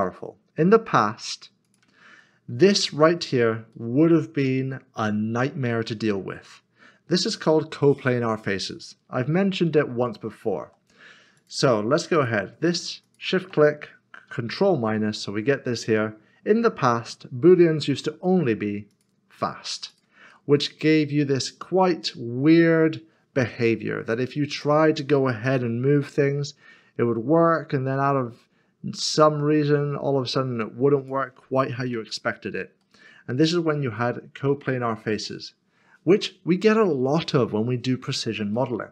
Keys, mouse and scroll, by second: 1.6 click, 2.2 middle click, 3.2 scroll up 1, 3.7 middle click, 9.1 scroll down 1, 9.7 shift+middle click, 11.4 click, 12.6 s, 13.0 shift+click, 14.5 ctrl+KP_Subtract, 18.9 click, 20.3 click, 20.5 middle click, 23.0 scroll down 1, 23.6 middle click, 24.5 click, 31.0 g, 32.0 ctrl+z, 32.8 ctrl+z, 33.0 middle click, 33.5-34.2 scroll up 2, 34.2 middle click, 34.6 shift+middle click, 35.7 scroll down 1, 38.5 middle click.